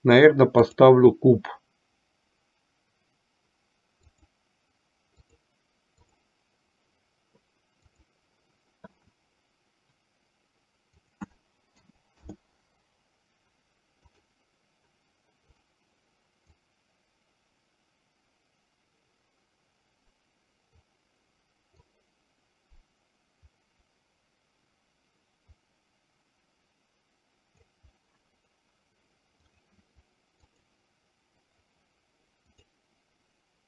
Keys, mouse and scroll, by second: 0.8-4.4 drag, 5.4-6.4 drag, 8.0-8.5 drag, 11.0-12.6 drag, 14.1-16.1 drag, 16.8-20.9 drag, 22.0-27.6 drag, 29.6-33.6 drag.